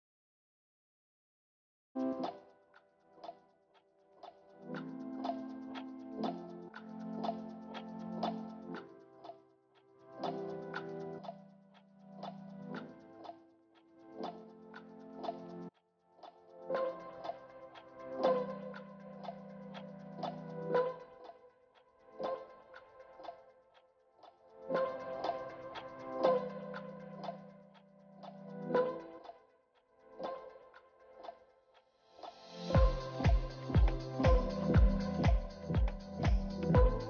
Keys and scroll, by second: 28.6 ctrl+space, 31.8 shift+F6, 36.1 ctrl+d.